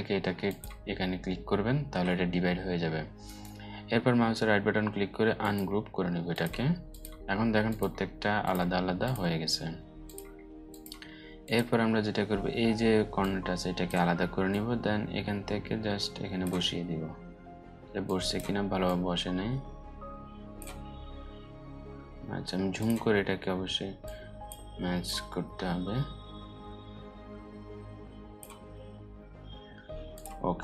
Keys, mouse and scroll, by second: 2.8 right click, 16.5 alt+scroll up 1, 17.6-19.3 drag, 21.2 alt+scroll up 1, 22.3-24.2 drag, 28.4 alt+scroll up 2, 29.0-29.7 alt+scroll up 1, 29.7 click, 30.1-30.6 alt+scroll down 3.